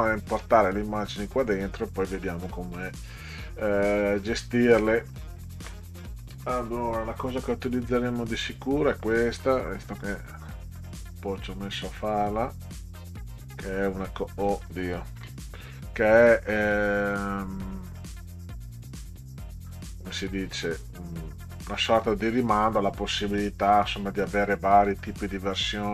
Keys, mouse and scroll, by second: 2.3 middle click, 3.9 click, 5.1 click, 7.3-8.5 drag, 11.7-12.2 drag, 12.6 click, 13.4 click, 15.2 ctrl+c, 17.0 click, 17.8 click, 18.0 click, 19.9 click, 20.6-22.1 drag, 24.2-25.9 drag.